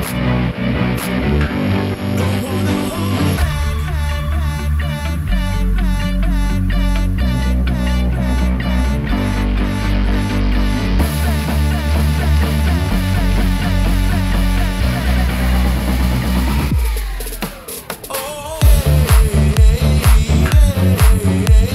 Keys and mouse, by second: 1.5 i, 4.8 Tab, 5.3 ctrl+a, 6.3 Tab, 7.1 middle click, 9.3 i, 12.0-13.7 drag, 14.0 3, 14.3 click, 15.0 click, 15.9 shift+click, 16.2 shift+click, 16.6 click, 18.3 shift+click, 18.6 click, 19.7 shift+click, 20.1 shift+click, 20.5 middle click.